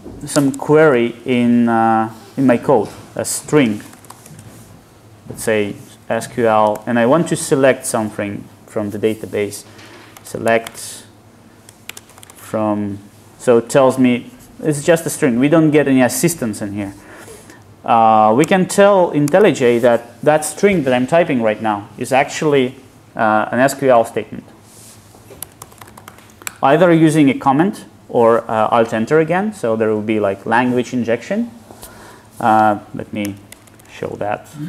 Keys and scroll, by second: 34.3 alt+Return.